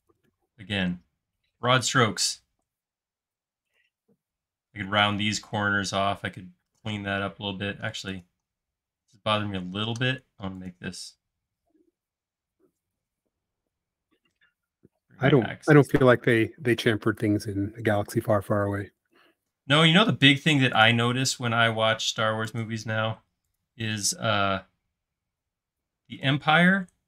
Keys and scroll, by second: 23.2 space, 26.3 s.